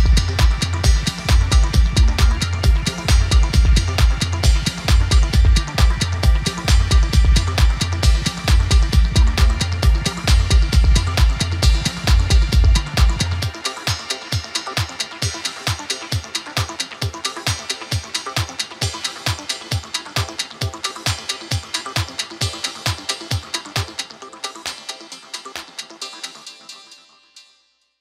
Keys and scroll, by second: 0.0-3.2 typing, 5.4-7.1 typing, 10.1-13.7 typing, 15.0 g, 16.1 typing.